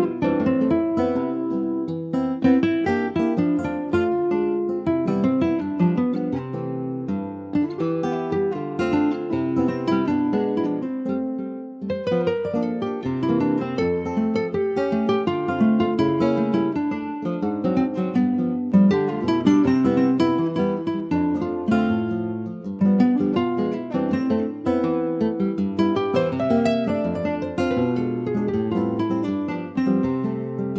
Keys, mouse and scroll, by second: 1.6 click, 3.1 s, 5.3 alt+middle click, 6.1 alt+z, 6.8 alt+z, 7.1 shift+middle click, 7.8 ctrl+s, 8.2 click, 9.3 middle click, 10.1 s, 12.0 middle click, 12.7 ctrl+s, 13.4 s, 14.8 middle click, 15.3 s, 16.3 alt+middle click, 17.1 ctrl+s, 17.8 click, 19.3 middle click, 19.7 Tab, 19.8 click, 20.4 middle click, 20.8 Tab, 21.0 scroll down 3, 21.6 click, 21.9 middle click, 22.6 /, 22.9 click, 23.1 scroll down 2, 23.4 middle click, 23.8 scroll down 1, 24.1 middle click, 24.7 ctrl+s, 24.9 middle click, 25.1-25.5 scroll up 3, 25.5 click, 25.8 middle click, 26.0 scroll up 1, 26.2 shift+middle click, 27.2 s, 29.0 click, 29.2 scroll down 1, 29.5-30.7 middle drag.